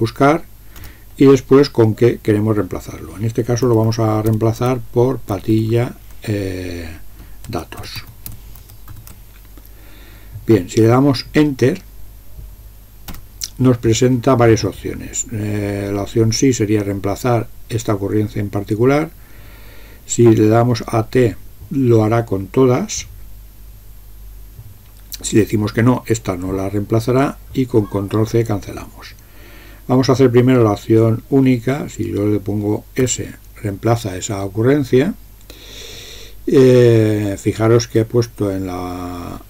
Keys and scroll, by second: 0.9 Return, 3.4-6.3 typing, 7.4-9.4 typing, 13.1 Return, 33.1 s.